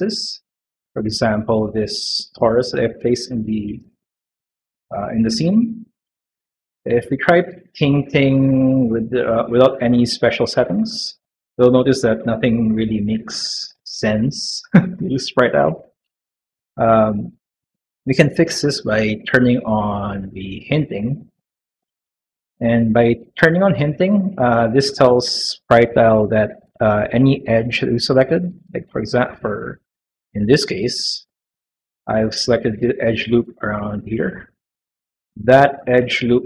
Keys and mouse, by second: 0.0 middle click, 0.4 middle click, 1.9 middle click, 2.6 middle click, 3.2 middle click, 3.6 shift+middle click, 4.2 middle click, 4.9 middle click, 8.4 click, 10.5 click, 20.5 click, 29.5 click, 31.0 click.